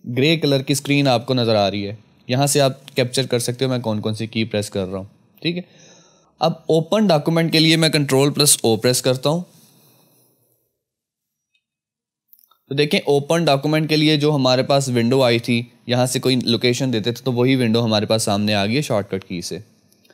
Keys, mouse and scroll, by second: 2.0 F2, 10.4 F1, 10.4 click, 11.5 ctrl+o.